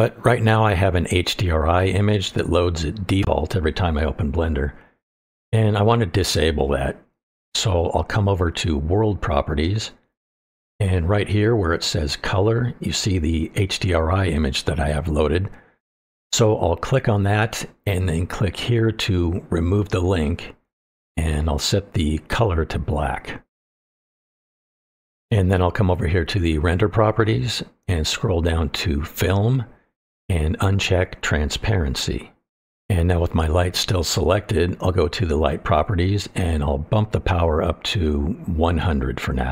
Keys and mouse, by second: 18.2-19.9 drag, 26.2 click, 30.0 click, 32.1 click, 34.9 click, 37.5-39.5 drag, 38.8 KP_0.